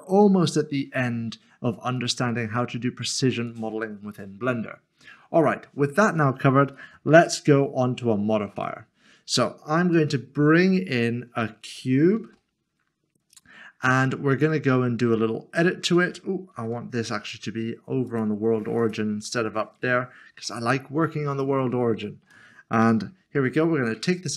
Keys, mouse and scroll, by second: 2.0 click, 8.6 Delete, 9.9 a, 14.3 a, 14.5 click, 15.1 shift+middle click, 16.5 s, 18.1 click, 19.2 Delete, 20.5 a, 21.3 a, 21.4 click, 21.8 s, 22.0 shift+middle click, 23.6 scroll down 1.